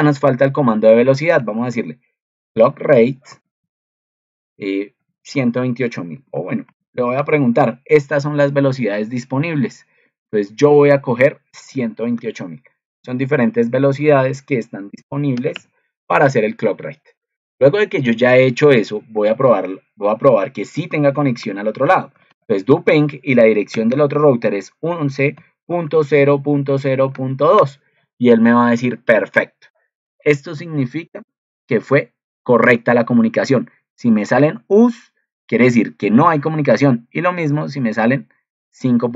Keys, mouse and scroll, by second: 30.1 ctrl+2.